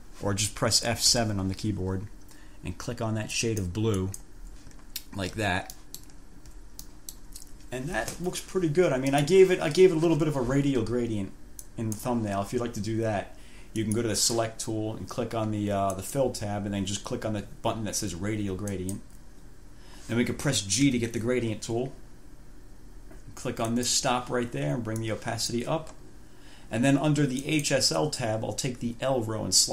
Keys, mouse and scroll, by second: 1.3 F7, 3.6 click, 4.2 click, 5.1-5.4 ctrl+scroll down 2, 6.0 ctrl+click, 6.4 ctrl+scroll down 2, 7.1 ctrl+click, 9.4 click, 11.9 click, 14.0 click, 16.1 click, 18.9 click, 21.0 g, 23.8 click, 25.2 click, 27.6 click.